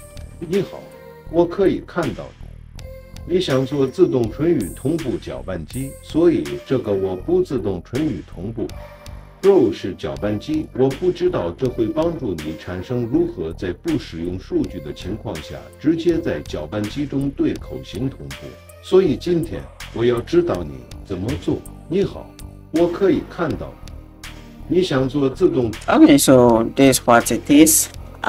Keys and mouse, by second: 0.4 space, 25.7 space, 26.8 click, 27.9-28.2 shift+middle drag.